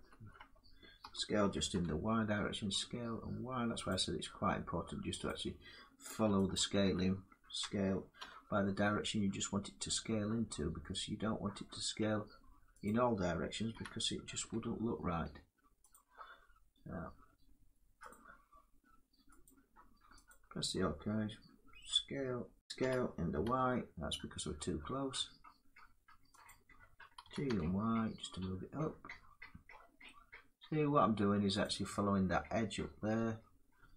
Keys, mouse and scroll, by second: 0.7 s, 1.4 y, 3.6 click, 5.1 click, 6.2 alt+click, 7.3 s, 7.9 y, 12.5 double click, 14.1 y, 15.6 click, 19.1 click, 20.0 alt+click, 22.5 ctrl+z, 22.5 click, 22.5 s, 23.1 y, 26.1 click, 27.1 g, 31.3 click, 32.3-33.9 drag.